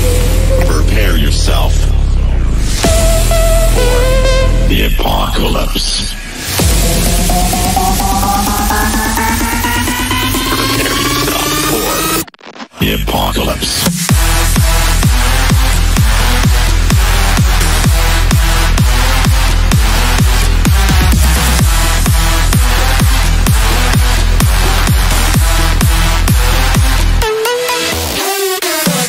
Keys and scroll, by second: 1.0 F3, 1.2 Escape, 2.1 shift+F2, 6.0 F3, 10.9 ctrl+s, 11.8 Return, 13.0 F4, 14.2 shift+F2, 14.5 shift+Page_Up, 14.7 F3, 24.3 Delete, 24.6 ctrl+z.